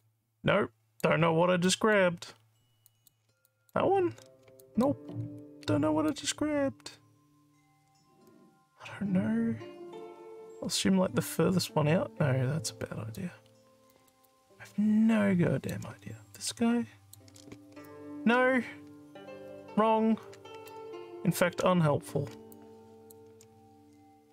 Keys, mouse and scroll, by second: 0.0-1.1 alt+drag, 1.7 alt+click, 2.3 alt+scroll up 2, 2.9 alt+click, 3.5 shift+click, 4.7 alt+click, 5.1 alt+scroll up 2, 6.1-13.1 alt+drag, 13.5 scroll up 2, 13.9 alt+middle click, 14.3-15.7 alt+drag, 16.4 shift+click, 17.8-20.7 alt+drag, 22.4 ctrl+z, 22.6 ctrl+click.